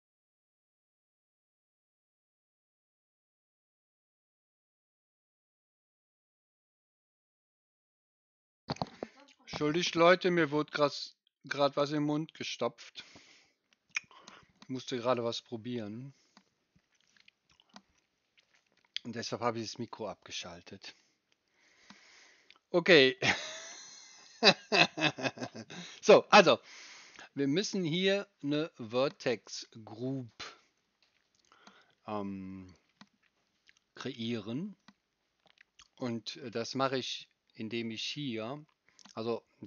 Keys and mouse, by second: 35.8-39.6 middle drag.